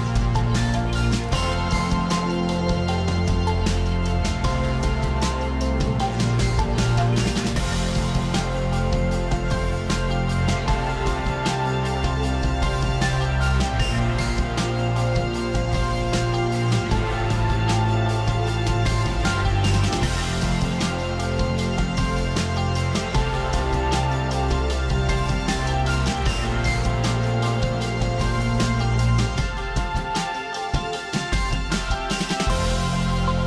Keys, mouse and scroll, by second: 0.3 click, 1.1 click, 3.1 click, 3.8 click, 5.1 alt+click, 6.1 click, 8.0 click, 10.0 click, 10.8-11.1 alt+scroll, 12.9 alt+click, 14.0 ], 15.5-16.0 click, 15.5 alt+scroll down 1, 15.5 ], 15.6 click, 15.7 click, 16.0 click, 16.1 click, 16.2 click, 16.5 click, 16.6 click, 16.7 click, 16.8 click, 16.9 click, 17.0 click, 17.0 alt+scroll down 1, 17.1 alt+scroll, 17.3 click, 17.5 click, 17.7 click, 17.8 click, 18.0 click, 18.1 click, 18.2 click, 18.5 click, 18.6 click, 18.8 click, 19.2 click, 19.8 click, 19.8 alt+scroll down 1, 20.0 click, 20.5 click, 21.5-23.1 alt+scroll up 1, 26.1 click, 28.8 click, 29.4 alt+click, 30.3 alt+click, 33.1 click.